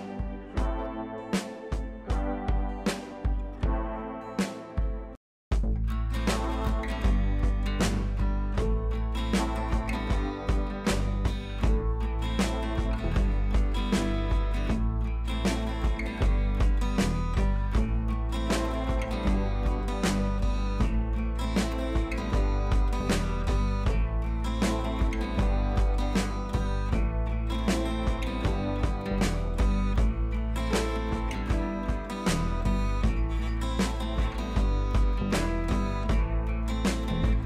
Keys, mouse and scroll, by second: 0.0-1.2 typing, 1.3-1.8 click, 4.6 click, 7.4 click, 8.6 click, 9.8 ctrl+j, 10.5 click, 17.1-18.8 drag, 19.8 click, 24.2-24.5 drag.